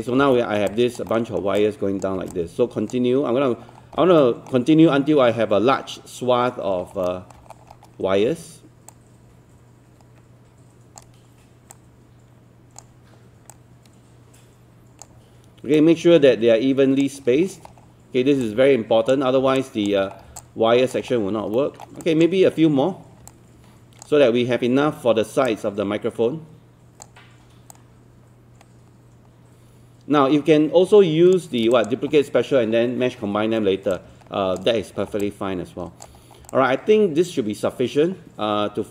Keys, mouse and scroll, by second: 0.2 scroll down 1, 0.3 alt+middle click, 0.7 click, 1.1 alt+middle click, 1.6 alt+click, 2.4 click, 3.7-4.1 alt+scroll down 2, 4.2 alt+middle click, 6.5 scroll up 1, 7.1 alt+middle click, 7.5 scroll up 1, 8.9-11.0 shift+drag, 11.7 shift+click, 13.5 shift+click, 15.8 shift+click, 17.5 scroll down 1, 18.5 click, 19.6 alt+click, 20.0 scroll down 1, 20.4 alt+click, 21.6 alt+middle click, 22.0 alt+click, 23.3 click, 25.4-27.0 shift+drag, 27.7-31.3 shift+drag, 31.8 click, 35.0 scroll down 1, 35.2 alt+click, 36.2 scroll up 1, 36.5-38.9 alt+drag.